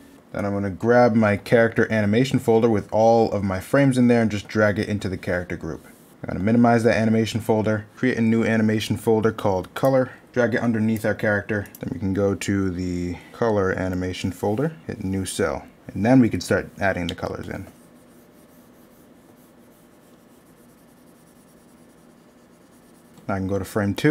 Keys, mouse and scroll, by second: 12.6 middle click, 15.6 middle click, 23.7 middle click.